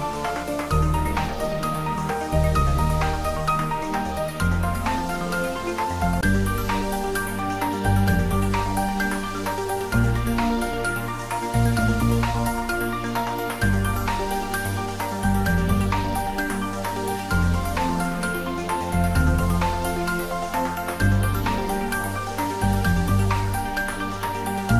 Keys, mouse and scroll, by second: 1.5-2.6 scroll up 1, 3.5-4.5 typing, 4.6 click, 6.0-7.0 typing, 7.7 click, 9.3 scroll up 1, 10.2 shift+z, 12.0 s, 12.4 z, 13.6 click, 15.3 g, 18.4 click, 18.7 scroll up 1, 19.9 `, 20.2 3, 20.9 scroll up 1, 23.7 g, 24.1 z.